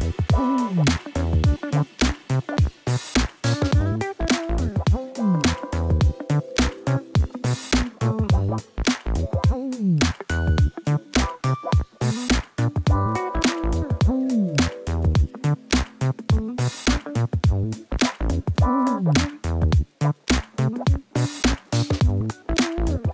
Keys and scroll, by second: 6.4 0, 7.1 d, 7.2 2, 8.2 e, 8.8 Return, 15.2 0, 16.0 a, 17.0 e, 17.3 f, 17.8 Return.